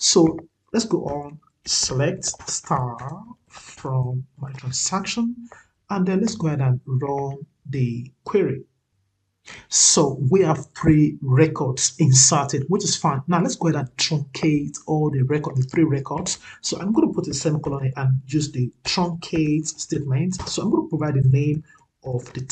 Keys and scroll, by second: 4.2 ctrl+v.